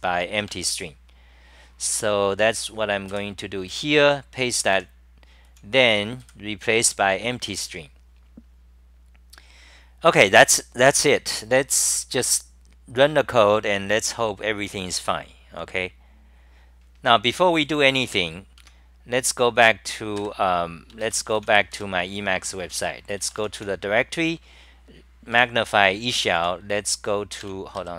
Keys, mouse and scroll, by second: 18.4-19.1 typing.